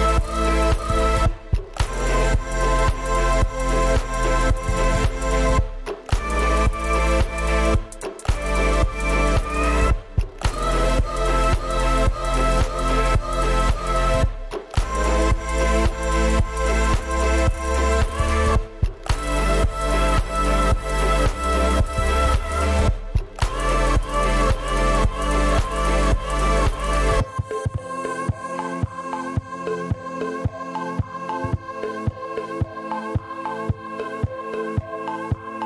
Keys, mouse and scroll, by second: 0.4 m, 1.0 y, 1.4 shift+click, 1.7 scroll down 3, 1.8 s, 6.7 middle click, 7.0-8.7 typing, 7.2 scroll down 4, 7.3 middle click, 7.7 double click, 8.8-9.7 scroll up 5, 10.1 shift+click, 10.3 middle click, 10.6 shift+click, 10.7 scroll down 4, 11.1 shift+click, 11.3 middle click, 11.7-12.3 scroll up 5, 12.5 shift+click, 12.7 middle click, 12.8 scroll down 2, 12.8 space, 13.0 middle click, 13.2 Delete, 14.7 middle click, 15.1 middle click, 15.3 ctrl+z, 15.3 ctrl+middle click, 15.5 middle click, 17.0 shift+middle click, 17.2 shift+middle click, 17.8 s, 18.2 y, 18.3 scroll up 9, 25.9 scroll down 11, 26.3 y, 26.5 middle click, 26.9 middle click, 27.0 space, 27.1 scroll up 5, 27.2 y, 27.4-27.7 scroll down 6, 28.2 scroll up 4, 28.3 y, 29.3 scroll down 7, 29.4 y, 29.7 middle click, 29.9 middle click, 30.6 middle click, 30.9-31.4 scroll up 16, 31.4 m, 32.0 shift+click, 32.1 scroll down 14, 32.3 middle click, 32.8 s, 33.0 space.